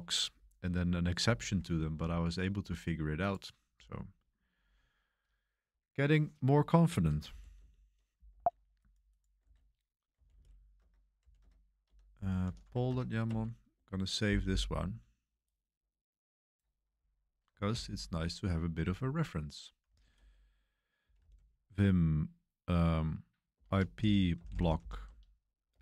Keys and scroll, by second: 7.0-8.0 typing, 8.3 ctrl+c, 9.4 ctrl+c, 9.9-13.2 typing, 17.7 super+3, 19.6-21.7 typing, 23.3-25.8 typing.